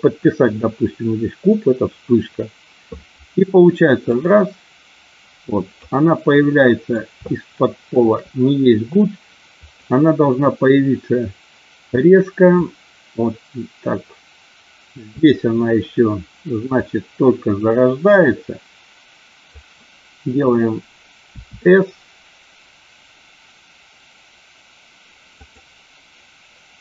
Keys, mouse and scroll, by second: 4.1-5.9 drag, 6.2 middle click, 7.2 shift+middle click, 9.6 click, 12.5-15.0 drag, 16.7 click, 21.4 s, 25.3 click.